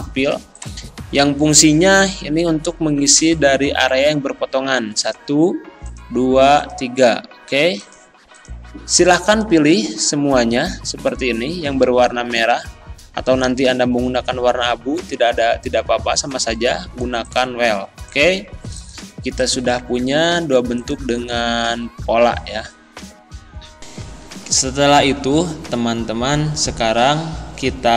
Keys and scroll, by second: 11.8 ctrl+z, 20.0 ctrl+z.